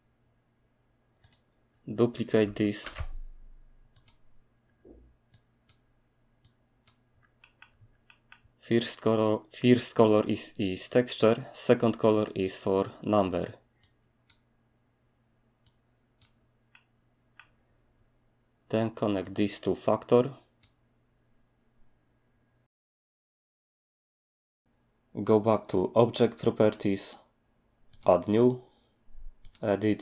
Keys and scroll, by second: 2.8 d.